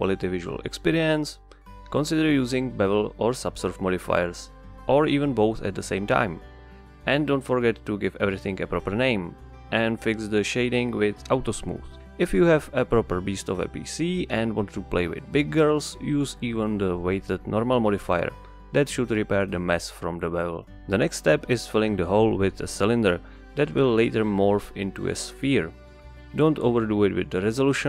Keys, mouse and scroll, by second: 0.0 right click, 1.1 click, 1.7-5.1 drag, 6.4 click, 7.3 click, 7.4-9.3 drag, 10.1 click, 11.0 click, 11.5 click, 17.1 click, 20.7 click, 21.0 shift+a, 23.5 drag, 24.4-25.9 drag, 25.9 KP_Enter, 27.3 s.